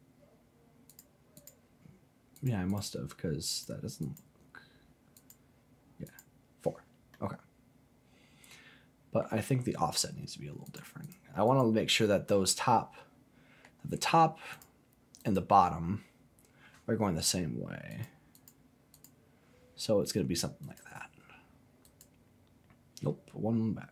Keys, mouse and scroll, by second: 0.9 click, 1.3 click, 2.3 click, 2.7 click, 3.5 click, 4.0 click, 5.1 click, 6.0 click, 7.1-9.2 middle drag, 10.6 click, 11.0 click, 11.4 click, 12.7-13.7 middle drag, 13.8-14.5 scroll down 1, 14.5 click, 15.2 click, 17.9 click, 18.3 click, 18.9 click, 20.6 click, 21.8 click.